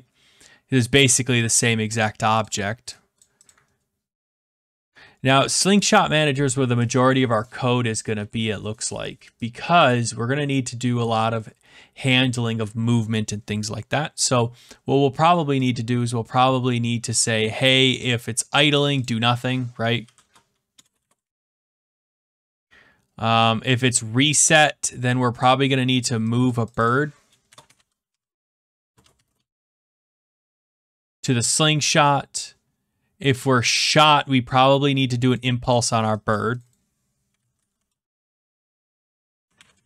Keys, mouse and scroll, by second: 0.9 click, 2.0 click, 2.4 click, 7.9 click, 9.8 click, 17.7 click, 18.1 click, 18.7 click, 19.0 click, 20.0-22.6 typing, 25.0 click, 25.5 click, 26.4 click, 26.7 click, 27.2-31.1 typing, 31.7 click, 35.3 click, 35.7 click, 37.0-39.8 typing.